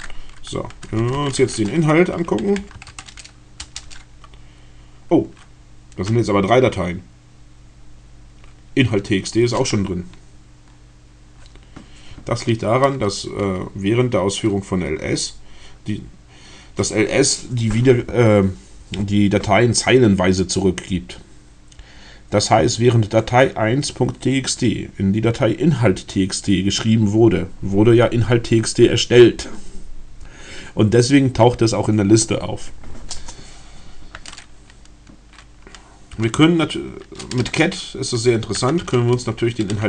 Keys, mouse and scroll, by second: 0.5-3.1 typing, 3.4 Return, 36.2 c, 37.4-39.8 typing.